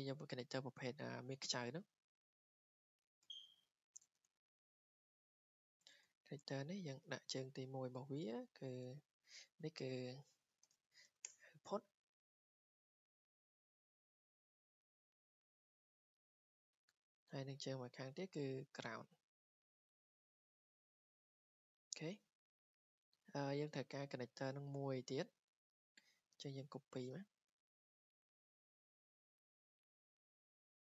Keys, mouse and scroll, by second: 1.9 click, 2.0 click, 3.3 r, 5.9 typing, 8.5 click, 8.7 Escape, 9.1 click, 9.2 click, 10.2-11.6 typing, 11.8 Escape, 12.3 scroll, 13.0 w, 13.8 click, 14.9 click, 16.1 Escape, 18.0 click, 18.9 click, 19.4 w, 20.4 click, 21.3 click, 21.7 Escape, 22.0-22.4 scroll, 24.9 click, 25.5 Escape, 26.2 Escape, 26.8 click, 27.5 ctrl+z, 28.4 click, 28.9 right click, 30.1 click, 30.4 click, 30.6 right click.